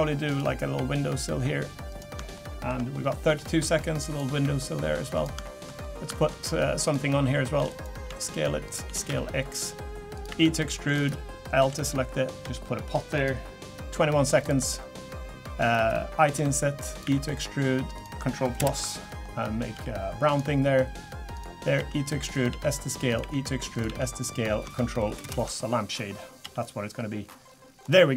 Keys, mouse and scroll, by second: 0.3 click, 0.7 e, 2.3 shift+middle click, 2.9-3.3 scroll down 1, 3.4 shift+middle click, 4.1 click, 4.4 e, 5.4 shift+middle click, 5.7 scroll up 3, 6.1 shift+middle click, 6.8 click, 7.6 shift+d, 8.1 s, 8.8 s, 10.3 e, 11.6 l, 12.4 g, 13.6-14.3 scroll up 1, 14.4 click, 16.2 i, 17.0 e, 18.6 ctrl+KP_Add, 19.7 g, 21.3 click, 21.8 e, 22.5 s, 23.2 e, 23.8 s, 25.1 ctrl+KP_Add, 26.4 g.